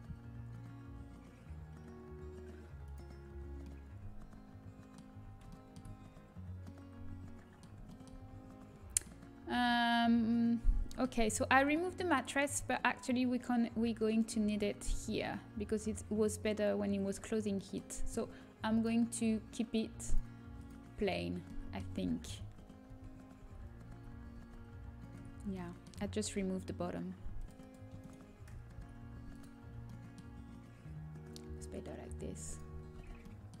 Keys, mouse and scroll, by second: 2.8-4.5 drag, 4.5 middle click, 5.3-11.1 middle drag, 11.7-15.6 middle drag, 17.5 middle click, 18.7-22.2 drag, 22.2 ctrl+z, 22.8 ctrl+z, 23.8 ctrl+z, 24.3 ctrl+z, 26.2 Tab, 27.3 click, 28.7 Delete, 29.3 click, 32.4-33.6 drag, 32.9 a, 33.5 Tab.